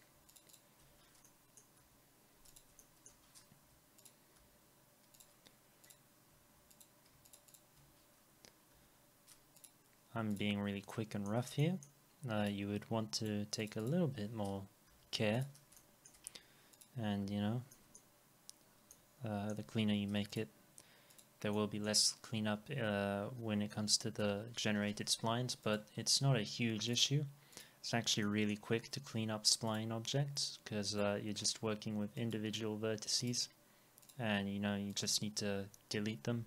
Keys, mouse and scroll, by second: 0.3 ctrl+click, 0.5 ctrl+double click, 1.3 middle click, 1.8 Delete, 2.8 alt+middle click, 3.6 Delete, 5.2 double click, 7.3 ctrl+click, 7.5 ctrl+double click, 8.7 Delete, 9.6 double click, 10.9 alt+middle click, 11.6 middle click, 13.2 ctrl+click, 13.5 ctrl+double click, 14.9 Delete, 16.1 alt+middle click, 16.3 scroll up 1, 17.2 Delete, 17.5 scroll down 1, 17.7 middle click, 21.5 middle click, 24.2 Delete, 25.0 scroll down 1, 28.2 middle click, 33.2 right click.